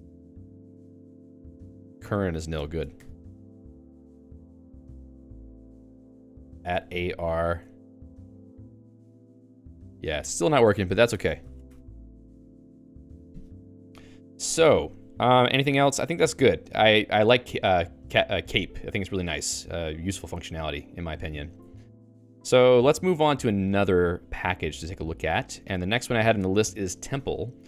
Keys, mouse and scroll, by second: 0.1 ctrl+j, 0.4 ctrl+j, 0.6 ctrl+j, 1.2 ctrl+k, 2.7 ctrl+g, 2.9 Escape, 5.7-7.3 typing, 10.2 Escape, 10.5 a, 10.6 BackSpace, 10.8 BackSpace, 11.0 BackSpace, 11.1 Escape, 11.4 ctrl+s, 11.6 Escape, 16.3 ctrl+s, 16.7-22.5 typing, 21.6 ctrl+s, 24.6 g.